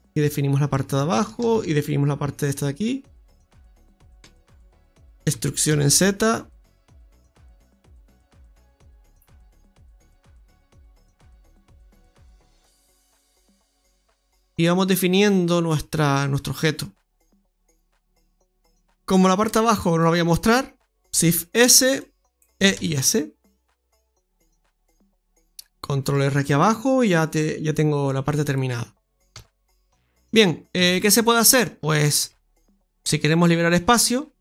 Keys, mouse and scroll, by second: 1.2 ctrl+r, 3.6 right click, 9.2 scroll down 1, 9.5 middle click, 10.9 ctrl+r, 13.2 Tab, 13.4-14.1 scroll down 2, 13.8 middle click, 15.0-16.6 scroll down 3, 15.4 middle click, 17.2 middle click, 17.2 scroll up 1, 18.2 middle click, 19.4 click, 21.0 shift+s, 22.6 e, 24.8 middle click, 26.2 ctrl+r, 28.9 middle click, 29.3 Tab, 29.5 scroll down 1, 29.7 middle click, 30.4-30.7 scroll up 2, 30.7 Tab, 31.2 middle click, 31.3 middle click, 31.7-32.2 scroll up 2, 32.2 shift+middle click, 33.3 middle click.